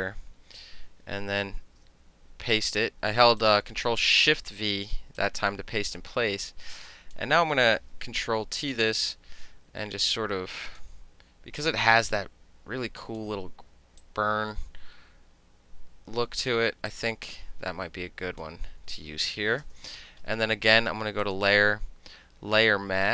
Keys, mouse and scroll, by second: 1.7 ctrl+shift+v, 3.5 click, 5.2-7.2 drag, 7.2-9.0 middle drag, 8.1 ctrl+t, 9.0-10.8 drag, 10.8 middle click, 11.6-13.2 drag, 13.2 middle click, 14.1-16.5 drag, 16.5 middle click, 16.9-18.5 drag, 18.5-19.5 middle drag, 19.8 KP_Enter, 21.3 click.